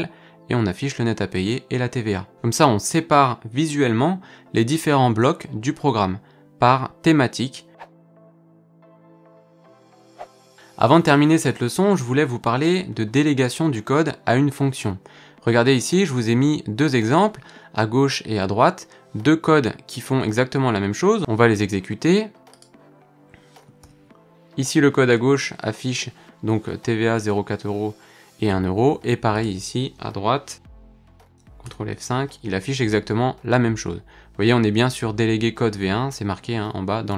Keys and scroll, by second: 23.8 ctrl+F5, 31.6 ctrl+F5.